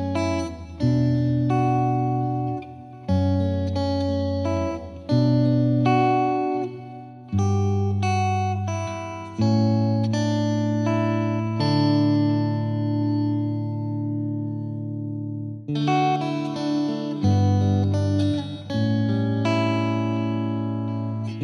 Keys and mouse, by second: 0.7 F3, 1.1 click, 1.7 click, 2.9 click, 3.4 click, 3.8 F3, 4.0 F3, 4.2 F2, 4.4 click, 5.5 click, 5.7 click, 6.2 right click, 6.6 click, 6.8 click, 7.3 click, 9.1 click, 9.6 click, 12.2 click, 12.7 click, 16.7 click, 17.3 click, 17.5 F3, 17.9 F2, 18.2 click, 19.9 Delete, 20.4 click.